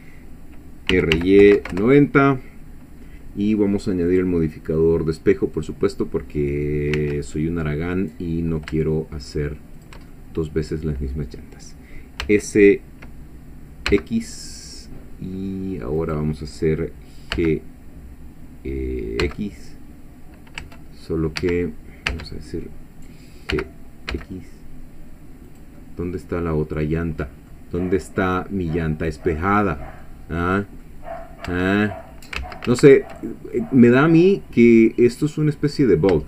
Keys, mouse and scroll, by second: 0.9 r, 1.1 y, 1.4 9, 1.6 0, 1.7 Return, 4.1 click, 5.6 click, 7.0 s, 9.8 shift+click, 10.1 shift+middle click, 12.2 s, 13.9 x, 16.0 click, 17.3 g, 19.2 x, 20.6 Tab, 21.4 Escape, 22.1 Tab, 23.5 g, 24.1 x, 25.5 click, 25.8-27.7 middle drag, 29.7 scroll down 1, 30.0 middle click, 31.2-31.5 scroll up 1, 31.5 Tab, 32.0 middle click, 32.4 ctrl+z, 33.2 ctrl+click, 33.3 ctrl+middle click, 33.4 ctrl+click, 33.6-35.5 middle drag, 35.7-36.1 scroll up 1.